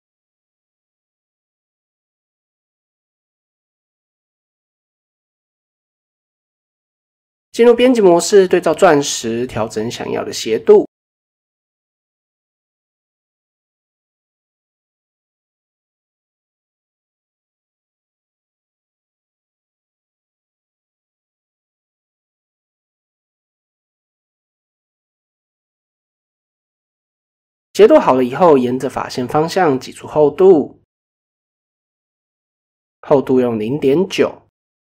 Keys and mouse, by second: 0.8 click, 1.0 click, 1.8 click, 2.9 Tab, 3.5 KP_1, 4.3-4.7 shift+middle drag, 5.7-6.8 drag, 7.8 e, 9.5-9.9 middle drag, 10.3 middle click, 11.2 s, 12.6-13.1 drag, 13.1 middle drag, 13.4 shift+middle click, 14.2-14.8 drag, 15.5 shift+middle click, 15.9 s, 17.1 click, 18.3 middle click, 18.8 click, 20.3 click, 21.0 shift+middle click, 22.5-23.1 drag, 24.1 s, 25.2 middle click, 26.0 a, 26.7 KP_7, 27.9 alt+e, 30.6-33.7 drag, 34.4 KP_1.